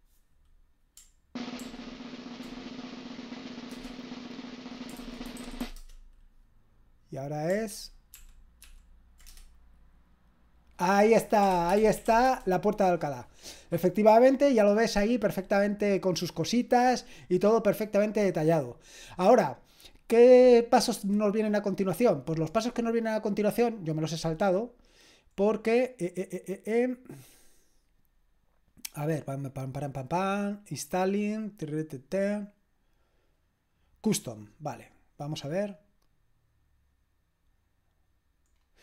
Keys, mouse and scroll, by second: 1.6 ctrl+p, 4.8-6.1 typing, 7.7 ctrl+p, 8.1 ctrl+p, 8.6 ctrl+p, 9.3 Return, 11.2-12.5 typing, 34.3-38.7 drag, 38.7-38.8 scroll down 1.